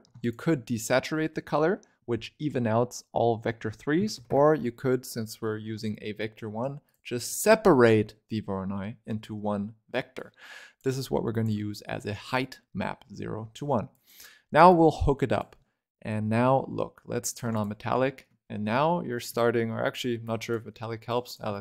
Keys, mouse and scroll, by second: 10.1 click, 11.2 ctrl+right click, 12.3 click, 13.8 click, 14.6 click, 17.2 click, 17.9 shift+middle click, 18.6 scroll up 4, 18.8-19.3 scroll down 1, 19.3 shift+middle click, 20.1-21.6 drag.